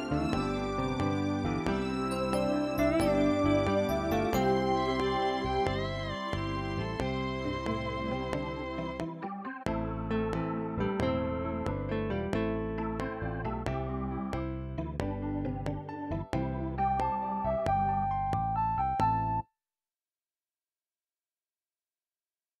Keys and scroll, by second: 9.3 ctrl+Left, 10.5 ctrl+s, 19.4 space.